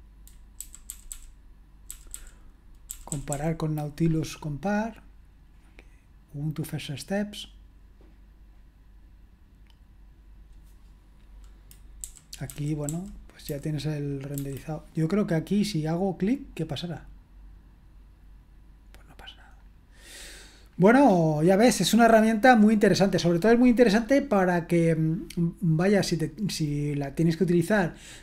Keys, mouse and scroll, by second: 0.6 Down, 0.9 Down, 1.1 Down, 1.9 Down, 2.1 Down, 2.9 Down, 3.1 Down, 3.3 Down, 7.4 click, 12.0 Down, 12.5 Down, 12.8 Down, 13.5 Down, 14.3 Down, 16.6 click, 19.6-20.7 scroll up 1, 20.7-22.9 scroll down 1.